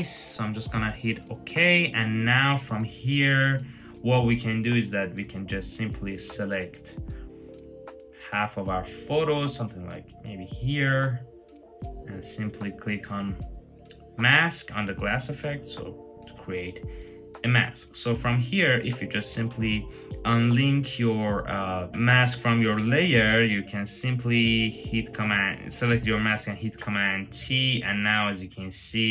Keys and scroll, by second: 26.1 super+t.